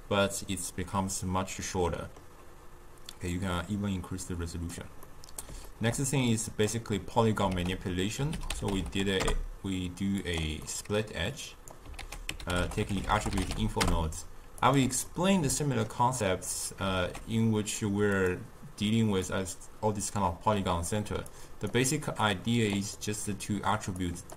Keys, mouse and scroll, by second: 3.3-10.2 drag, 10.2 ctrl+a, 14.6 t, 20.8-24.3 drag.